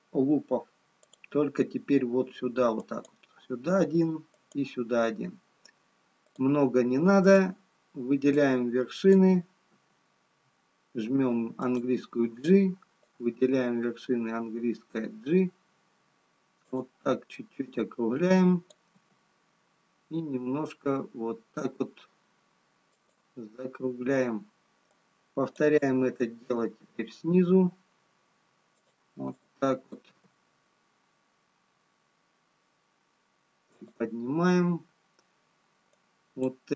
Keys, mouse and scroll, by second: 1.8 click, 3.0 click, 8.5 click, 10.5 g, 16.2 click, 18.2 click, 19.1 g, 25.2 click, 26.2 g, 29.3 click, 30.3 g, 36.7 click.